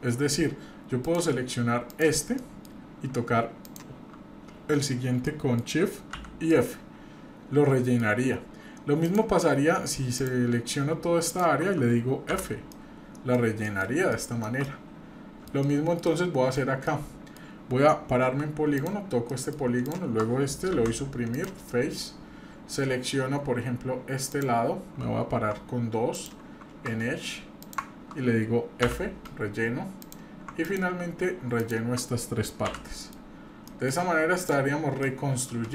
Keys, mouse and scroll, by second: 1.0 click, 1.9 click, 2.4 middle click, 3.6 shift+click, 5.2 middle click, 6.1 f, 6.5-8.0 middle drag, 8.2-9.0 scroll up 1, 9.0 click, 10.1 shift+click, 11.3 shift+click, 12.3 f, 12.7 middle click, 13.4-13.9 scroll down 2, 13.6 middle click, 14.1 shift+middle click, 14.5 shift+scroll down 1, 14.6 middle click, 15.6 shift+middle click, 16.1 shift+scroll down 1, 16.7 scroll up 1, 16.9 middle click, 18.2 3, 18.8 click, 19.3 middle click, 19.8 shift+click, 20.7 Delete, 24.3 click, 25.4 click, 26.1 click, 27.6 shift+click, 28.8 f, 30.0 click, 30.6-31.8 ctrl+drag, 32.7 f, 33.0 middle click, 33.2-33.5 scroll down 2, 33.7 middle click, 34.4 click, 34.7 scroll down 2, 35.0 middle click.